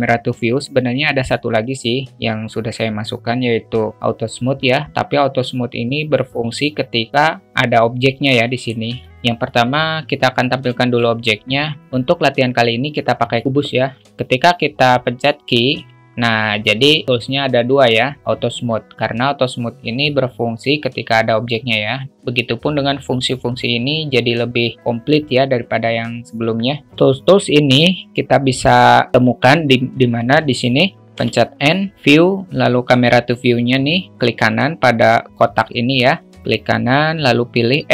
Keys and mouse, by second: 8.5 click, 9.0 alt+shift+middle drag, 10.7 shift+a, 16.0 q, 26.9 q, 30.1 click, 31.9 n.